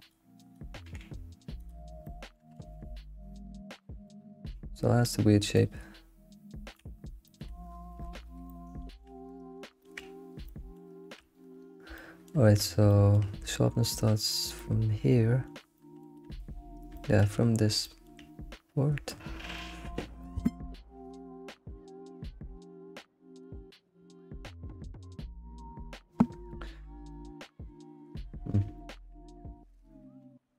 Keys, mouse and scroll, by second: 0.5 click, 1.1 g, 2.0 shift+middle click, 2.6 alt+x, 4.0-6.9 shift+middle drag, 7.2 shift+middle click, 7.7-8.3 scroll down 10, 8.4-9.5 shift+middle drag, 9.5-10.4 scroll up 4, 9.8 shift+middle click, 10.5-18.0 shift+middle drag, 19.2-29.5 shift+middle drag, 29.5-29.8 scroll down 2, 29.9 shift+middle click.